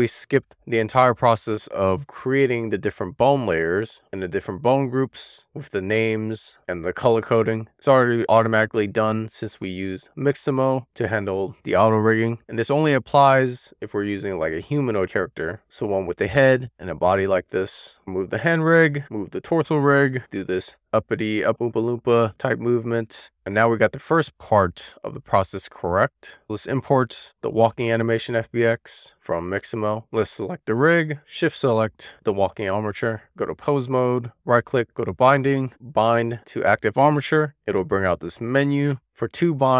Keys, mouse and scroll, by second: 0.2 click, 1.1 click, 1.5 click, 3.5-4.2 shift+middle drag, 5.3 click, 13.8 super+z, 17.9 click, 18.2 super+z, 18.3 middle click, 18.5 click, 19.0 click, 26.1 super+z, 26.5-28.5 drag, 30.4 click, 31.3 shift+click, 33.2-34.3 drag, 34.8-37.4 right drag, 39.5-39.7 drag.